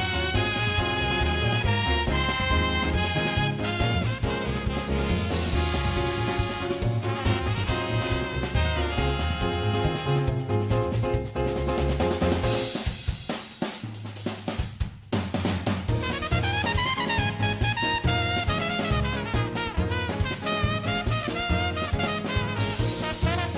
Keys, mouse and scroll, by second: 5.6 middle click, 6.1 middle click, 6.2 middle click, 6.3-7.2 typing, 9.0 middle click, 9.4 right click, 9.4 middle click, 9.8 middle click, 9.8-13.0 typing, 9.9 middle click, 10.1 middle click, 10.2 middle click, 10.5 middle click, 10.6 middle click, 11.4 middle click, 11.5 click, 11.7 middle click, 11.9 middle click, 12.2 middle click, 12.4 middle click, 12.6 middle click, 12.9 middle click, 13.0 middle click, 15.4 middle click, 15.6 middle click, 15.7 middle click, 17.9 shift+click, 18.1 ctrl+shift+z, 18.2 c, 19.4 middle click.